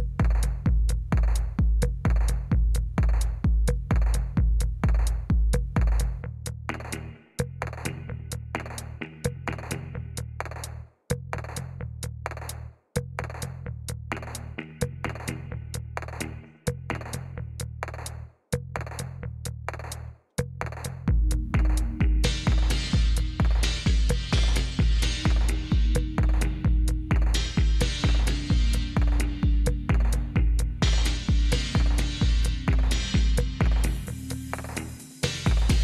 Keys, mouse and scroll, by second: 4.1 Right, 4.7 Return, 18.1 Up, 19.7 Up, 20.1-21.3 Up, 22.3 Up, 22.7 Up, 23.1 Up, 23.1 Up, 23.3 Up, 23.6 Up, 23.9-25.3 Up, 25.6 Up, 26.3 Up, 26.6 Up, 27.2-28.6 Up, 28.9 Up, 29.3-30.8 Up, 34.3 Down.